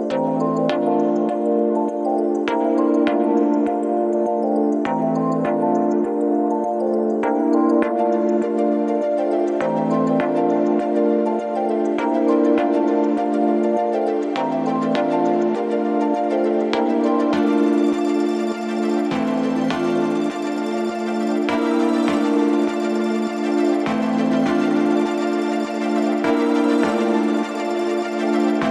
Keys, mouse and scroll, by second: 16.5 click, 19.4-28.7 drag.